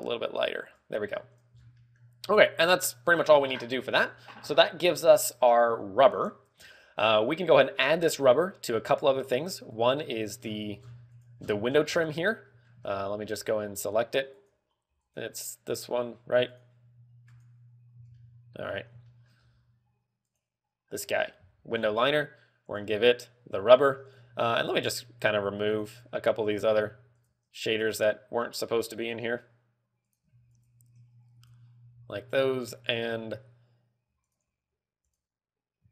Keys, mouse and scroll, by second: 1.8 click, 2.0-2.5 scroll down 4, 2.3 middle click, 2.9 middle click, 6.8 scroll down 3, 7.2 shift+middle click, 8.4 scroll up 4, 8.8 shift+middle click, 9.4 scroll up 2, 10.7 right click, 11.9-12.4 scroll down 8, 12.5 z, 13.0 middle click, 13.1 scroll down 1, 13.4 shift+middle click, 14.0-14.5 scroll up 2, 14.4 z, 15.1 right click, 15.8 right click, 16.5 right click, 17.3 right click, 18.1 right click, 18.5 z, 18.7 middle click, 19.1-19.9 scroll up 4, 19.6 shift+middle click, 20.9 right click, 20.9 scroll up 1, 21.9 z, 22.2 scroll down 5, 23.2 click, 23.9 scroll down 1, 25.1 click, 27.2 click, 27.6 shift+click, 27.8 shift+click, 28.3 click, 30.6 click, 31.0 shift+click, 32.1 click, 35.8 click.